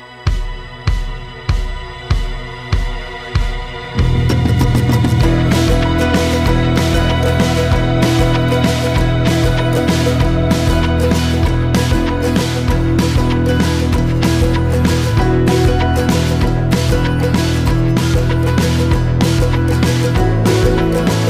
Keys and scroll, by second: 0.0 ctrl+l.